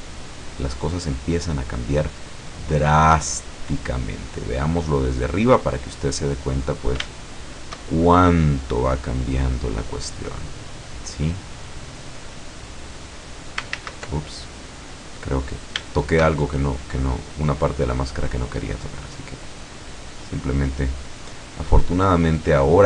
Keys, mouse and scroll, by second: 2.2-4.9 drag, 5.6-7.0 middle drag, 7.9-9.1 shift+middle drag, 9.4-10.9 drag, 11.0-12.9 middle drag, 13.8 ctrl+z, 14.6 click, 15.6 scroll up 2, 15.9-16.9 shift+middle drag, 17.4-21.3 drag, 21.4-22.8 middle drag.